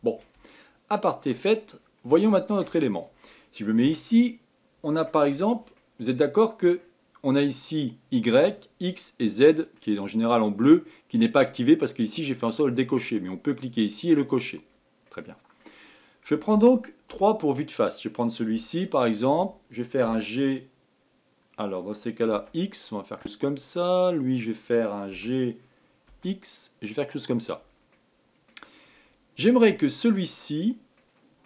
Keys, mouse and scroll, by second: 0.6-1.5 shift+middle drag, 1.5-2.1 scroll up 5, 2.1-2.9 shift+middle drag, 2.9 click, 3.8 Tab, 4.1-8.7 middle drag, 9.4-11.5 middle drag, 11.5-14.6 drag, 15.0-17.1 middle drag, 17.1 3, 17.8 click, 20.0 g, 24.2 click, 25.2 g, 28.0 middle click, 28.9-29.8 scroll up 4, 29.8 middle click, 30.5 click, 31.1 middle click.